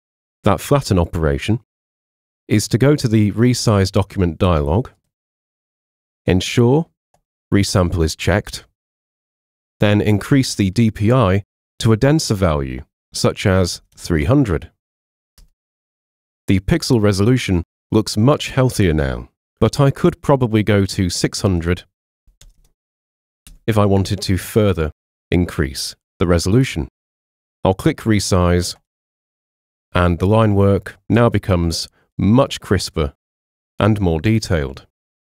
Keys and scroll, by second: 13.3-14.3 typing, 15.4 Tab, 22.0-23.0 typing, 23.5 Tab.